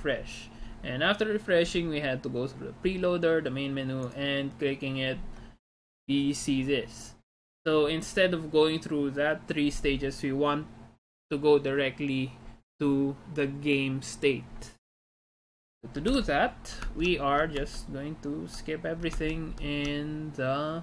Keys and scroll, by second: 16.2 alt+Tab, 16.9 alt+Tab, 17.6 alt+Tab, 18.8 alt+Tab, 19.2 alt+Tab, 19.5 alt+Tab.